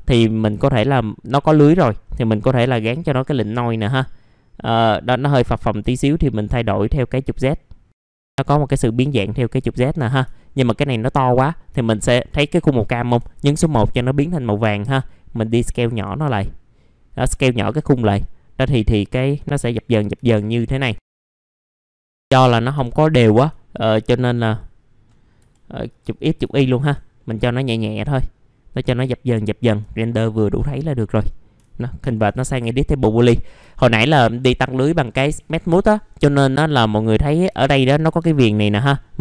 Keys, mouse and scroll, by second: 0.2 scroll up 1, 0.6 alt+middle click, 1.5-8.1 drag, 2.6 n, 8.1 f, 8.4-9.2 scroll down 1, 10.3 alt+middle click, 13.1 1, 14.2-18.0 drag, 18.2 alt+middle click, 19.6-19.9 scroll up 1, 20.2 alt+middle click, 21.5 click, 22.2 F4, 23.2 alt+middle click, 24.2 click, 25.4 KP_5, 25.8 click, 26.4 KP_5, 27.1 middle click, 27.7 alt+middle click, 29.1 alt+middle click, 29.6 scroll down 1, 29.9 alt+middle click, 31.3 scroll up 1, 32.7-33.6 scroll up 1, 33.7 alt+middle click, 36.9 alt+middle click, 38.8 middle click.